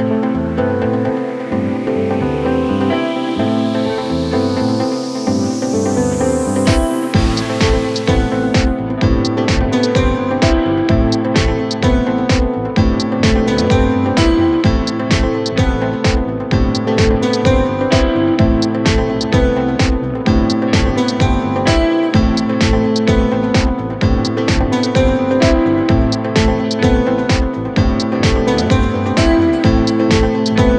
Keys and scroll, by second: 21.7 Delete.